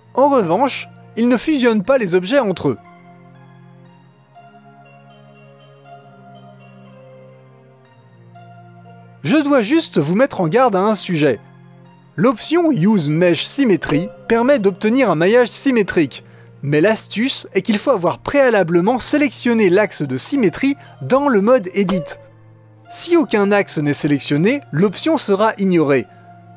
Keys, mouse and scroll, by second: 1.8-4.0 drag, 4.8 Tab, 5.2 click, 6.0 l, 6.8 g, 9.6 middle click, 12.8-16.0 drag, 18.7-20.2 drag, 21.6 click, 22.6-23.3 middle drag, 23.3-26.4 drag, 26.4-26.5 middle drag.